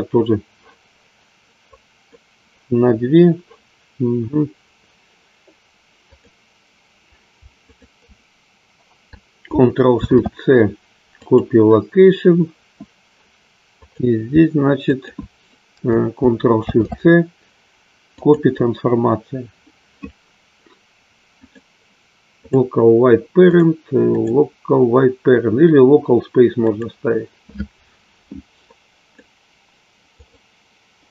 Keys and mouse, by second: 1.6 click, 6.0 click, 7.6-8.6 shift+drag, 13.6-16.0 drag, 21.4-22.6 drag, 24.1-27.4 drag, 28.7 click, 30.2-31.1 drag.